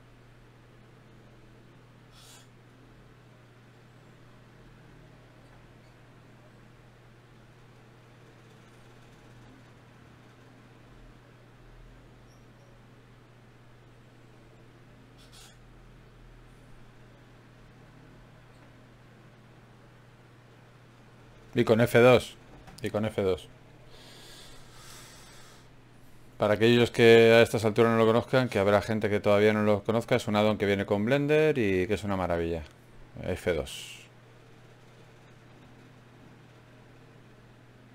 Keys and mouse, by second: 0.0 click, 0.8 g, 1.6-3.2 drag, 2.6 ctrl+Tab, 4.8 f, 7.0 ctrl+r, 8.4 g, 10.4 click, 10.8 middle click, 11.4 ctrl+Tab, 12.7 middle click, 13.4-14.7 right drag, 14.7-18.2 drag, 18.2 ctrl+Tab, 19.7 click, 20.6 f, 20.8 f, 21.1 f, 21.2 f, 23.9-25.4 right drag, 24.7 f, 25.9 ctrl+Tab, 26.9 right click, 30.7 d, 30.9-32.7 drag, 34.7 shift+q.